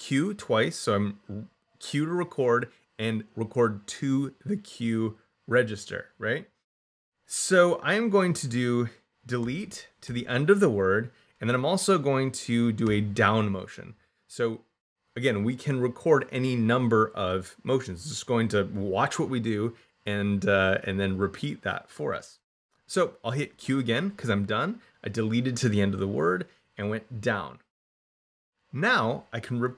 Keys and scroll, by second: 9.3 d, 9.9 e, 23.3 q.